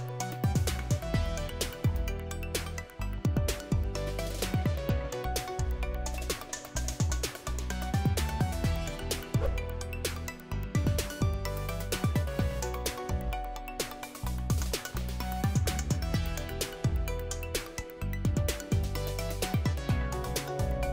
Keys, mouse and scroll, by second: 0.0 click, 3.5 click, 3.8 click, 5.6-7.2 drag, 11.0 click, 12.3 click, 12.6 click, 15.0 click, 17.4 click.